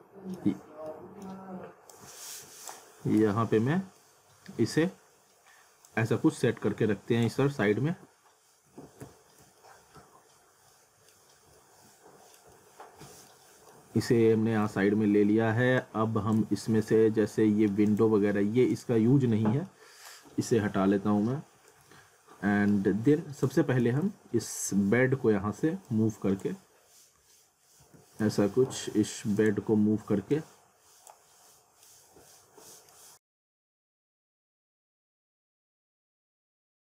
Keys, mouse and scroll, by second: 1.9 click, 3.2 z, 3.7 scroll down 1, 4.0 middle click, 5.8 click, 7.9 alt+w, 9.0 z, 9.6 alt+middle click, 11.3 scroll up 1, 11.5 alt+middle click, 13.0 alt+middle click, 13.5 scroll down 1, 13.7 alt+middle click, 14.9-15.3 scroll down 1, 15.8 click, 16.4 z, 16.8 alt+middle click, 17.9 click, 19.1 scroll up 1, 19.3 alt+middle click, 21.6 scroll up 1, 21.9 alt+middle click, 23.4 click, 23.8 z, 24.1 alt+middle click, 24.7-25.6 scroll down 1, 25.9 click, 26.7 scroll down 1, 27.8 ctrl+z, 28.4 alt+middle click, 29.4 click, 31.5 middle click, 32.1 scroll down 1, 32.3 middle click, 33.7 click, 34.6 w, 35.0 z, 36.1 e.